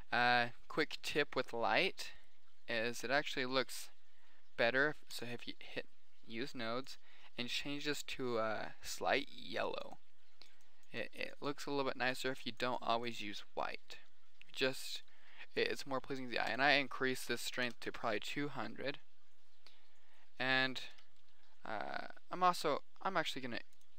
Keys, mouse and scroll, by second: 0.0 Escape, 2.5 right click, 17.0 click, 18.0 KP_0, 21.3 KP_1, 23.0 r.